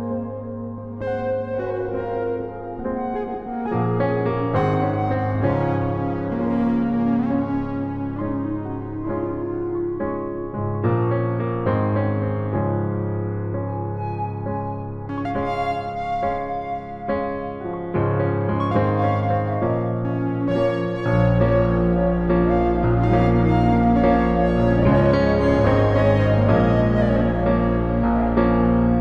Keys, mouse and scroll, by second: 1.3 e, 2.1-3.8 drag, 4.9-6.0 middle drag, 6.0 KP_1, 7.6 a, 10.5-12.5 drag, 14.8 shift+a, 17.7-19.6 drag, 19.2 r, 22.0-23.5 middle drag, 23.5-24.6 drag, 24.6 KP_1, 26.4-29.0 drag, 28.6 s.